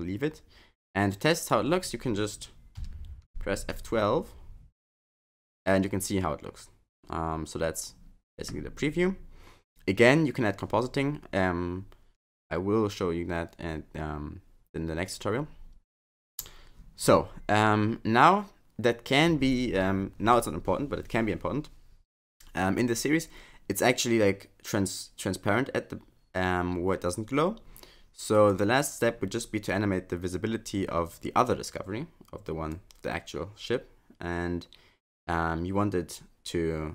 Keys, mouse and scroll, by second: 28.5 click, 32.7 click.